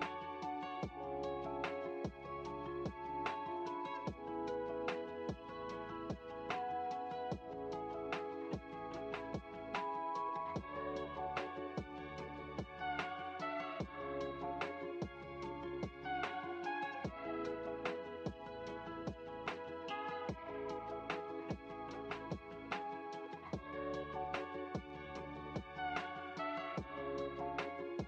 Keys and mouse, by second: 3.1-9.1 drag, 10.2 click, 12.7 middle click, 14.1 middle click, 15.4-20.8 drag, 21.6-26.8 drag, 27.4-28.0 drag.